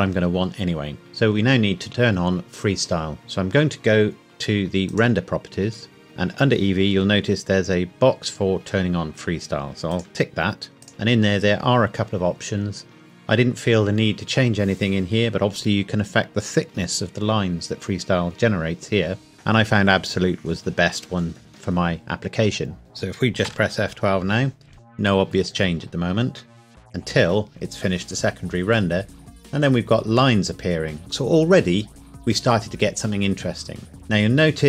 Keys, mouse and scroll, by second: 6.1 click, 9.9 click, 10.7 scroll down 1, 10.9 click, 11.3 scroll down 1, 23.5 F12, 29.6-30.1 scroll up 1, 33.9 scroll up 1, 34.0-34.6 scroll down 1.